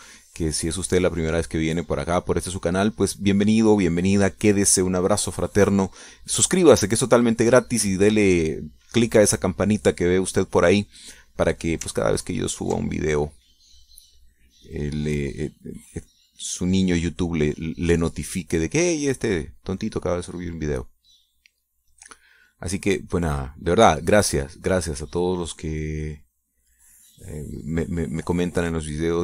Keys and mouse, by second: 5.5-8.3 drag, 8.6 middle click, 13.4 ctrl+click, 14.6-19.9 drag, 20.0-21.1 drag, 21.7-25.6 drag, 25.9-28.8 drag, 28.9-29.2 drag.